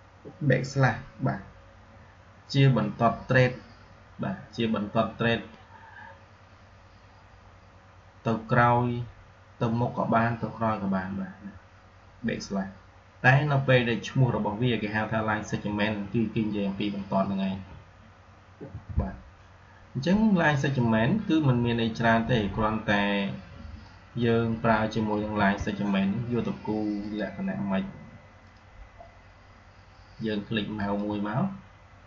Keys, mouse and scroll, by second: 18.6 Delete, 25.1 \, 26.9 click, 30.7 click.